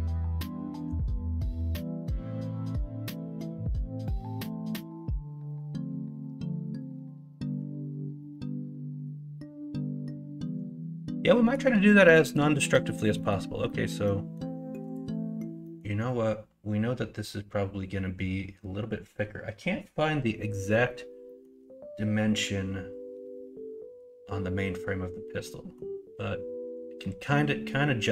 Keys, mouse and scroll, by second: 13.1 middle click, 13.6 middle click, 15.6 middle click, 21.2 middle click, 25.4 middle click.